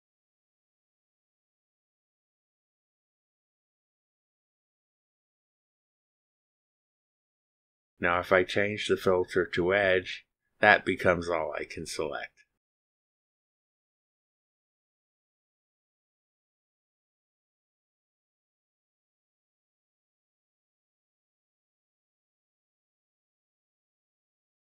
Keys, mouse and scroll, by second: 0.5 click, 2.7 click, 3.6 click, 5.1 click, 6.8 click, 9.2 click, 12.2 click, 15.5 click, 19.1 click, 21.5 click, 23.8 click.